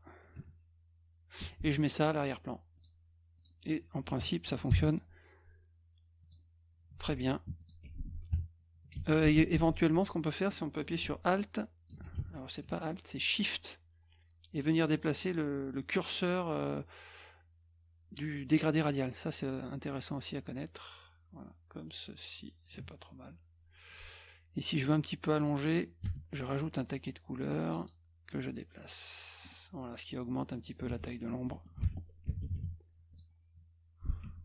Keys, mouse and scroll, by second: 0.4 F2, 1.4 F1, 2.8 click, 3.4 click, 4.7 ctrl+shift+l, 6.2 click, 7.5 F2, 7.6 click, 7.8 F1, 8.3 ctrl+click, 9.0 ctrl+z, 11.4 alt+click, 12.2 ctrl+z, 12.8-22.7 shift+drag, 26.0 g, 27.5 click, 27.8 click, 28.5-30.7 drag, 30.9 F1, 33.1 click.